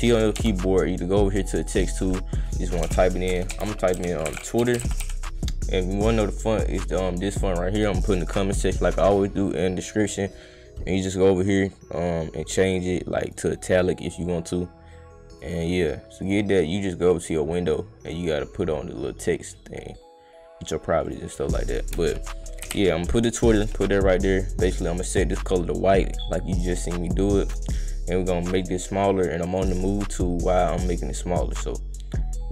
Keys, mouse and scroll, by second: 0.4 g, 1.6 click, 2.9-5.5 typing, 6.5 click, 7.3 click, 8.3-9.5 drag, 11.0 right click, 13.2 click, 15.3 click, 16.2 click, 20.6 click, 21.0 click, 23.4 click, 24.6 click, 25.3 click, 26.0 click, 27.0 click, 28.0 click, 28.6 click, 29.8-30.8 drag, 31.5-32.5 right drag.